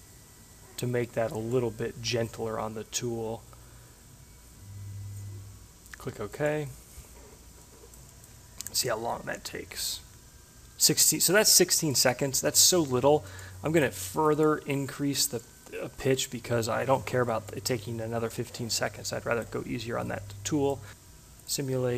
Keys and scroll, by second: 2.1 2, 15.6 1.